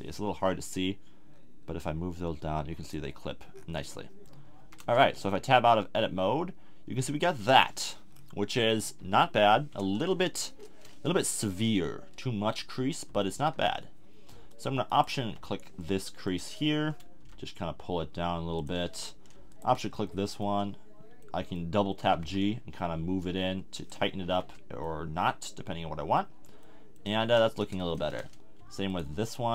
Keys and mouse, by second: 1.8-3.5 drag, 3.5 middle click, 4.6 a, 4.8 Tab, 7.3-8.1 middle drag, 9.0 KP_1, 10.2 Tab, 14.5-17.2 middle drag, 17.2 g, 19.9-21.3 middle drag, 22.0 g, 24.0 click, 24.2 a, 24.4 Tab, 27.0 Tab, 28.9-29.5 middle drag.